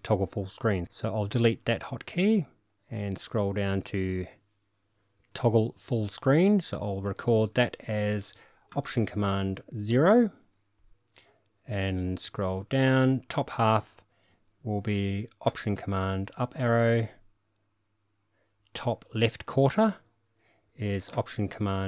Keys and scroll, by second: 9.9 alt+super+o, 16.1 alt+super+Up.